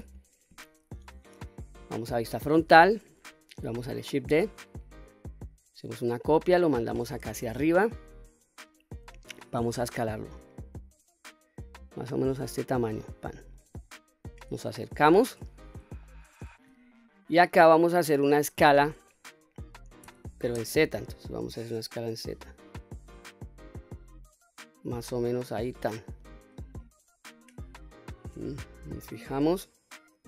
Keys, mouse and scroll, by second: 2.1 KP_1, 4.2 shift+d, 6.1 right click, 7.1-8.6 drag, 9.7 s, 13.3 click, 13.9-14.7 scroll up 3, 14.8 shift+middle click, 15.5 scroll up 2, 16.1 shift+middle click, 20.0 s, 20.6 z, 25.7 click, 27.4 middle click, 28.3-29.0 scroll down 2, 28.7-30.2 middle drag.